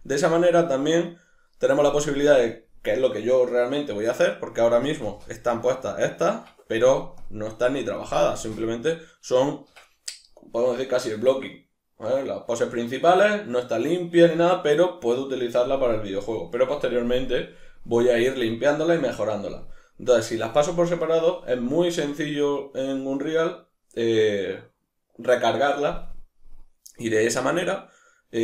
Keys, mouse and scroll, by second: 0.0-7.1 middle drag, 5.0 space, 6.3 Escape, 7.1 click, 8.3 space, 9.7 Escape, 21.8-28.4 middle drag.